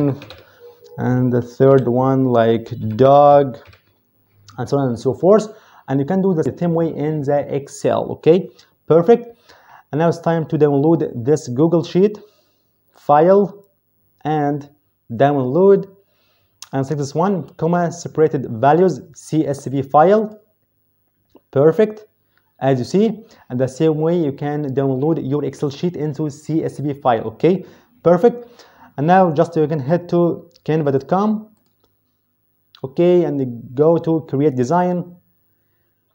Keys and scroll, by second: 0.0-0.7 typing, 1.6 Down, 2.7-3.6 typing.